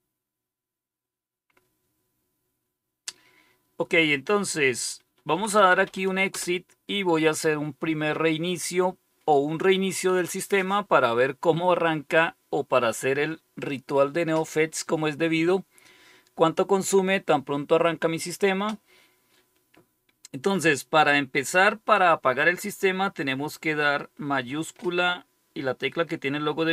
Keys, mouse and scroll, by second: 5.0-6.3 typing, 8.1 typing.